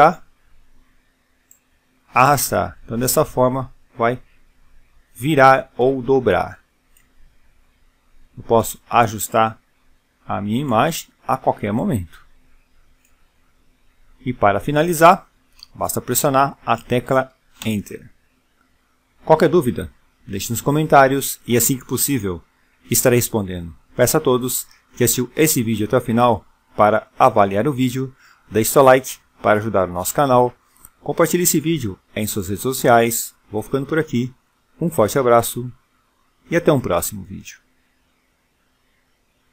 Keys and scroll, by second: 15.1 Return.